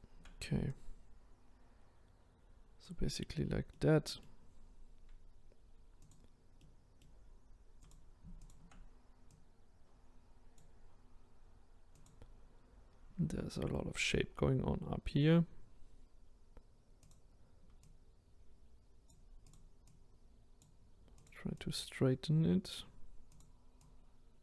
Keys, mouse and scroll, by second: 3.7 middle click, 4.6-6.1 scroll down 1, 6.1 click, 6.6-7.9 middle drag, 7.9 click, 8.5 shift+click, 12.0 click, 12.9 scroll up 2, 15.8-16.2 scroll down 1, 16.2-17.1 scroll up 1, 17.1 click, 17.9 click, 20.0 click, 21.2 click, 21.7 click, 23.4 click, 23.8 click.